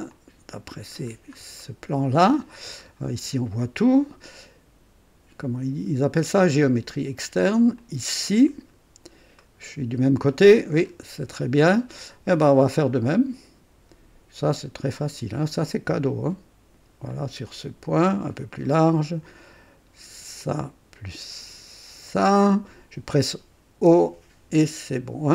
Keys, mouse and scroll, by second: 0.1 click, 1.1 scroll down 1, 1.6 right click, 2.3-2.8 scroll up 1, 2.8 right click, 6.4 click, 7.8 click, 8.5-8.9 scroll down 2, 9.4 right click, 10.9-11.2 scroll up 2, 11.4 right click, 13.1 click, 15.0 click, 17.1 click, 18.2 click, 18.7 right click, 20.4 click, 22.1 click, 23.7 o.